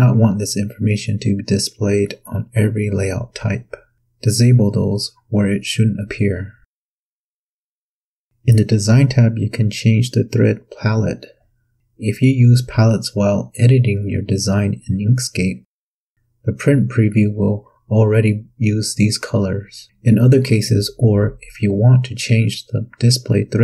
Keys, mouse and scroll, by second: 1.4 click, 4.6 click, 5.6 click, 10.4 click, 15.0 click.